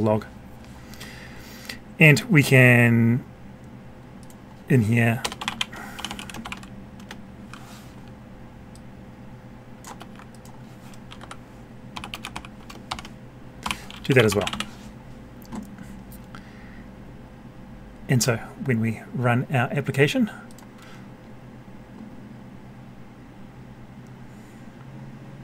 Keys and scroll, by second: 9.9 ctrl+c, 12.1 ctrl+v.